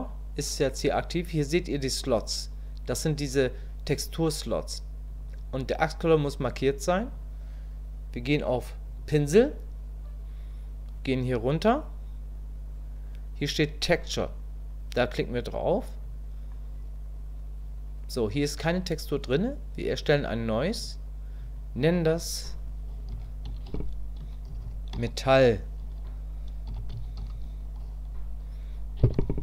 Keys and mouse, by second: 5.1 click, 16.0 click, 20.8 click, 21.8-29.4 drag.